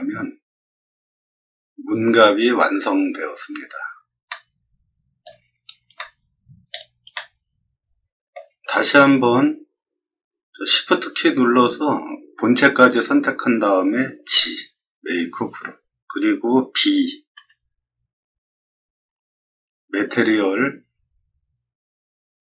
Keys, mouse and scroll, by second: 1.5 middle click, 4.2 middle click, 5.9-6.6 shift+middle drag, 7.1-8.2 shift+middle drag, 12.8 shift+click, 14.3 g, 17.3 b.